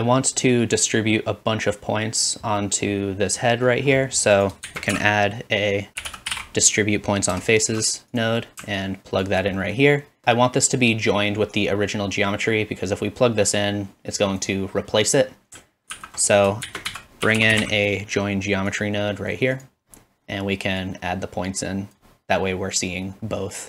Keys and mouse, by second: 0.9 click, 1.4-4.4 middle drag, 4.4-14.8 shift+drag, 4.7 typing, 8.2 typing, 15.9 ctrl+z, 16.8 shift+a, 19.7-20.9 drag.